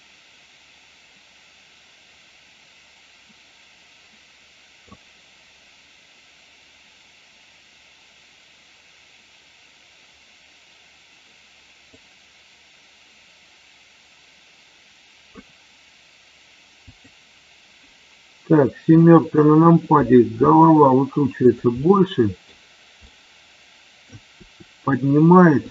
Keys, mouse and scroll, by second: 12.0-15.4 drag, 17.0 click, 20.4 r, 21.7-22.5 middle drag, 23.0 middle click, 24.0-25.7 scroll down 1.